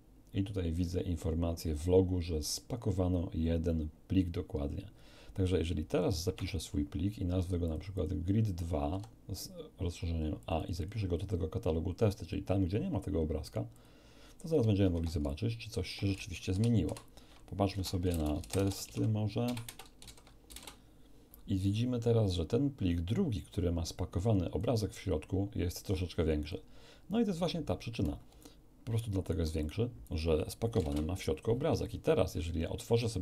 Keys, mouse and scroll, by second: 6.3 F2, 7.6 click, 8.9 a, 10.4 click, 10.9 right click, 13.7 click, 14.8 alt+F1, 15.3 alt+click, 16.8-20.5 typing, 18.0 Return, 18.8 Tab, 19.6 Return, 23.0-24.7 drag, 25.8 click, 28.4-29.5 alt+right drag, 29.6 alt+click, 30.7 alt+l, 30.8 Return, 31.8 click.